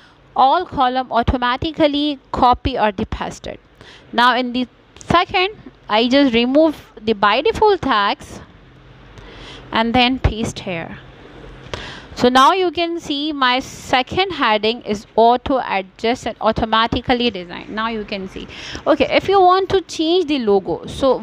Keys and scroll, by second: 13.1 BackSpace, 13.6 2.